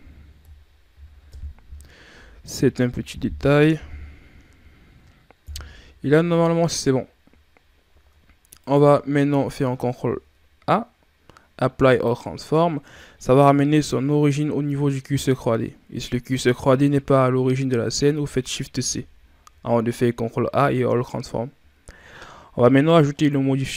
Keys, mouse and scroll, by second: 0.3 KP_3, 1.2 KP_1, 3.4 KP_7, 5.3 KP_1, 8.2 scroll up 1, 8.4 right click, 9.0 ctrl+scroll down 2, 9.5 ctrl+a, 13.0-13.4 shift+scroll up 5, 18.6 shift+c, 19.5 shift+scroll down 5.